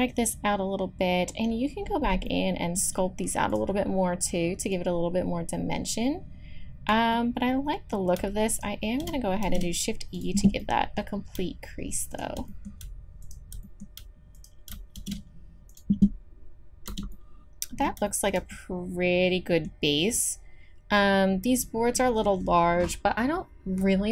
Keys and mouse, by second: 3.5-4.7 drag, 4.7-6.5 middle drag, 6.5 click, 8.5 click, 9.4 shift+e, 12.1-16.6 drag, 15.0 shift+e, 16.9 Tab, 17.1 click.